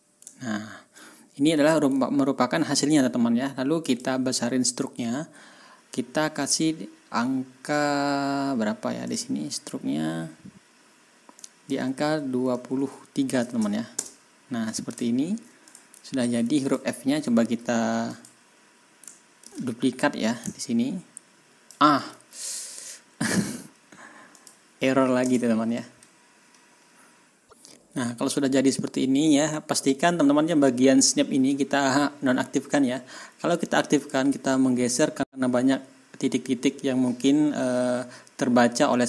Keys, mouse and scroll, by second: 0.3 ctrl+scroll down 2, 0.9 ctrl+scroll up 2, 2.0 ctrl+scroll down 2, 3.8 click, 9.0 click, 11.3 click, 12.7 ctrl+a, 13.5 KP_3, 13.9 Return, 15.1 ctrl+scroll down 2, 15.6 ctrl+click, 16.1 ctrl+scroll up 2, 16.6 ctrl+click, 18.1 click, 19.4 ctrl+s, 20.2-21.8 scroll up 3, 24.3 scroll up 2, 25.2 Return, 34.0 click.